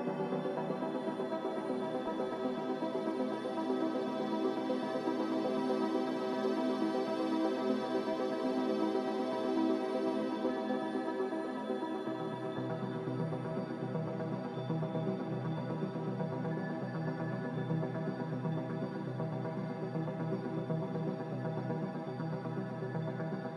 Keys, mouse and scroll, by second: 0.1 1, 4.6 0, 4.8 Return, 14.5 click, 16.3 x.